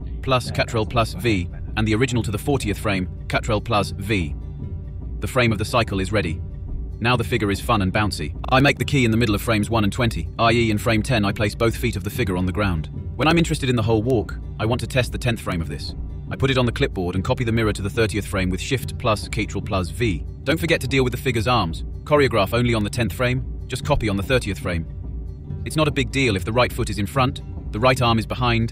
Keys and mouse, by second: 0.1 click, 0.6 click, 0.8 click, 1.0 ctrl+v, 1.7 click, 2.2 click, 2.7 click, 2.9 click, 3.6 BackSpace, 4.7 ctrl+c, 5.2 shift+click, 5.4 ctrl+c, 5.6 ctrl+shift+v, 5.9 click, 6.7 ctrl+c, 6.7 click, 6.9 ctrl+shift+v, 8.2 click, 8.8 click, 9.2 click, 9.5 click, 9.7 click, 10.0 click, 10.2 click, 10.5 click, 10.8 click, 11.2 click, 11.4 click, 11.7 click, 11.9 click, 12.3 click, 12.7 click, 12.9 click, 13.2 middle click, 13.7 click, 13.9 click, 14.1 click, 14.6 a, 14.7 click, 14.8 ctrl+c, 14.9 click, 15.1 ctrl+shift+v, 15.2 drag, 15.5 click, 16.9 click, 17.6 click, 17.8 click, 17.9 click, 18.2 a, 18.3 click, 18.4 ctrl+c, 18.7 ctrl+shift+v, 19.7 click, 20.0 click, 20.4 click, 20.7 a, 20.7 click, 20.8 ctrl+c, 20.9 click, 21.0 ctrl+shift+v, 21.1 click, 21.6 ctrl+c, 21.7 click, 21.8 ctrl+v, 22.9 click, 23.8 middle click, 24.4 click, 24.9 click, 25.3 click, 25.6 click, 25.8 click, 26.1 click, 26.2 click, 26.5 click, 26.6 click, 26.9 click, 27.0 click, 27.3 click, 27.5 click, 27.8 click, 28.1 click, 28.6 click.